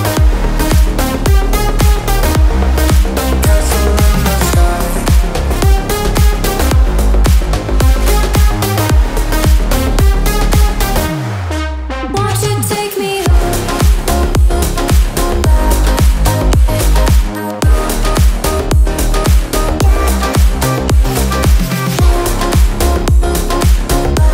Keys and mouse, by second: 0.7 a, 0.8 Tab, 1.0-4.4 right drag, 4.4-5.5 drag, 6.2 Return, 7.8 right click, 9.1 Delete, 10.3 a, 11.4 ctrl+j, 20.6 ctrl+s.